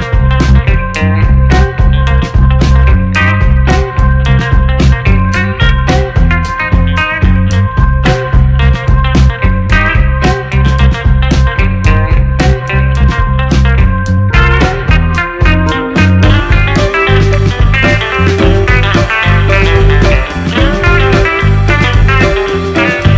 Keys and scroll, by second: 6.0-7.1 typing, 10.1 space, 16.0 2, 16.2 4, 16.3 Return, 22.1 2, 22.3 0, 22.5 Return.